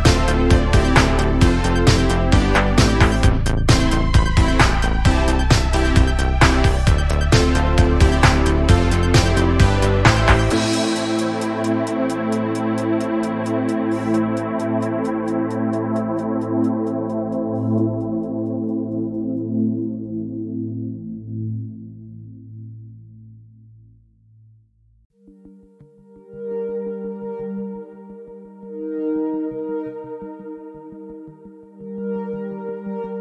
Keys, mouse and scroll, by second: 0.5 ctrl+r, 1.6 Tab, 2.5 click, 2.7-3.2 scroll down 3, 3.2 drag, 3.4-4.6 middle drag, 4.6 click, 5.3 Tab, 5.6-7.5 middle drag, 9.0 Tab, 9.2 scroll down 2, 9.3-10.5 middle drag, 10.5 click, 10.9-12.2 shift+middle drag, 12.2-13.5 drag, 13.5-15.3 middle drag, 16.2 scroll down 1, 16.5-17.0 middle drag, 17.0 scroll up 1, 19.3-20.1 middle drag, 20.1-20.9 scroll down 3, 20.9 click, 21.8 ctrl+middle drag, 22.0-22.8 scroll up 4, 22.8 scroll down 6, 24.1-26.1 drag, 26.5-27.0 scroll down 3, 27.5-28.5 scroll up 1, 29.0 click, 29.9 shift+a, 32.0 KP_7, 32.5 KP_Decimal, 33.0 scroll down 1.